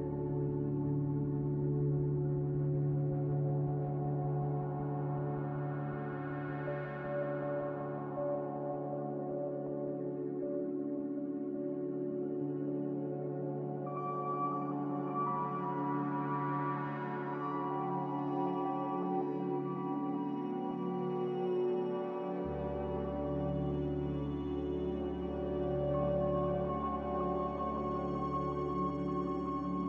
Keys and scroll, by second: 2.1 Delete, 5.1 ctrl+z, 27.5 ctrl+z.